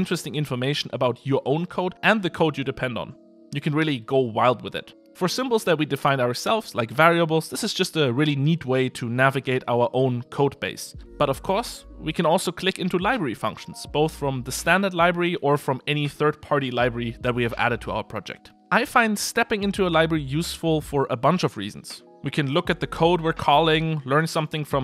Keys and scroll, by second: 1.3 super+b, 13.4 super+b, 13.7 super+b, 21.0 super+b.